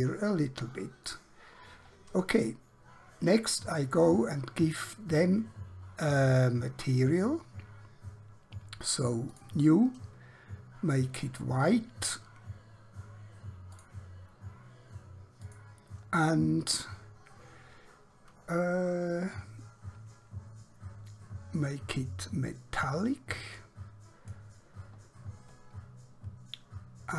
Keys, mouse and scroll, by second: 0.1 middle click, 7.1 click, 13.7 click, 21.4 scroll down 1, 22.9 click.